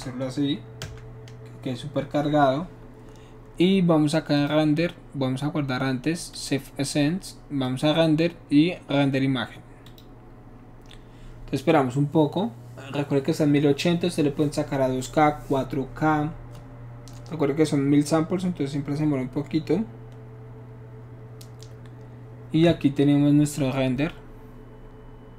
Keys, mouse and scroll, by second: 0.8 Return, 4.4 click, 6.3 click, 7.6 click, 9.8 click.